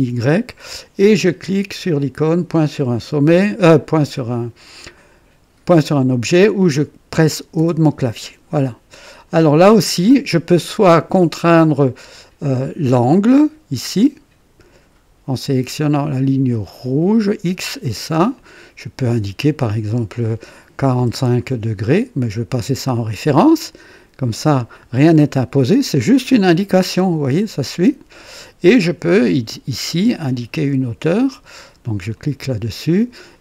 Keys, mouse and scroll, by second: 7.5 o, 8.5 right click, 9.1 click, 11.4 right click, 13.8 click, 16.6 click, 18.3 click, 20.7 KP_4, 20.9 KP_5, 22.6 click, 23.3 typing, 23.6 click, 26.7-28.6 drag, 29.8 click, 32.1 click.